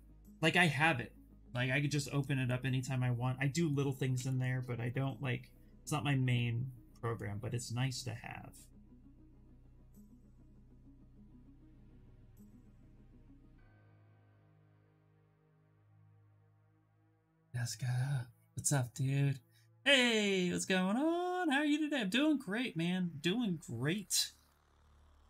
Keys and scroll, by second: 4.4 ctrl+z.